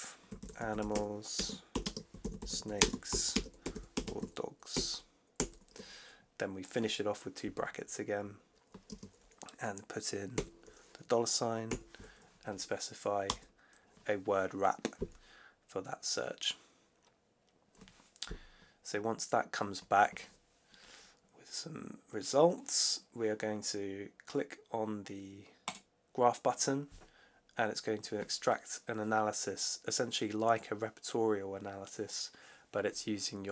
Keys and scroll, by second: 0.0-3.5 typing, 4.6 shift+0, 5.3 shift+0, 8.8 space, 10.2 shift+4, 11.6 8, 13.2 Return.